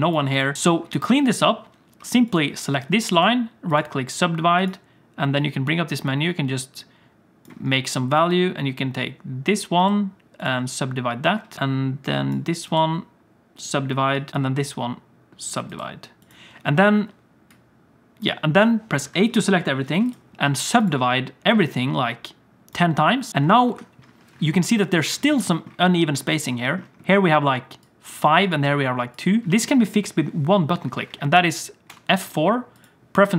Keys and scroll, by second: 19.0 a, 23.6 F4, 29.4 alt+shift+a, 31.9 F4.